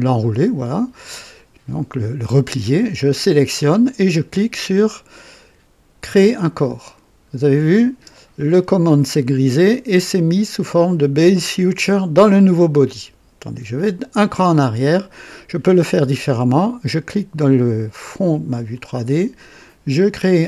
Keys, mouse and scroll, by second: 6.3 click, 14.1 click, 18.5 click.